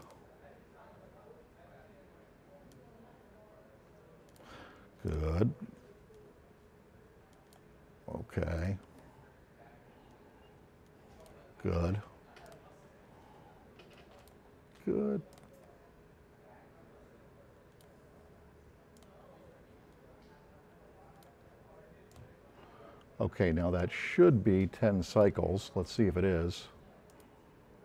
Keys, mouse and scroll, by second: 12.5-15.1 drag, 15.3-17.9 drag, 19.0-21.3 drag, 22.1-25.4 drag, 27.1 click.